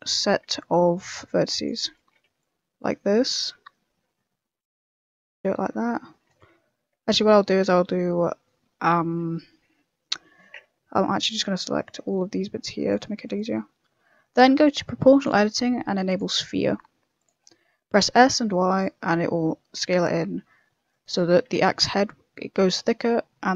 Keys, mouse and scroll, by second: 0.3 a, 0.5 c, 1.9 a, 2.2 c, 6.3 a, 7.0 right click, 7.5 a, 8.4 middle click, 9.7 KP_1, 10.8 b, 12.0 c, 14.6 click, 15.1 click, 16.4 middle click, 17.1 click, 17.4 middle click, 17.7 middle click, 17.9 s, 21.0 middle click, 21.5 s.